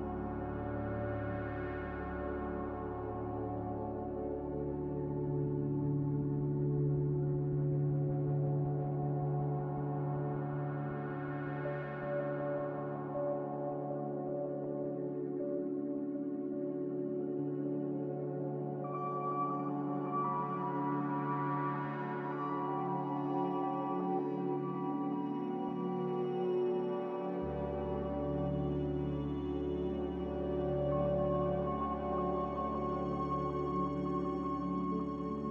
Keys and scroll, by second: 9.4-11.1 typing, 22.8 Delete, 24.3 z, 33.7 4, 34.3 BackSpace, 34.6 3.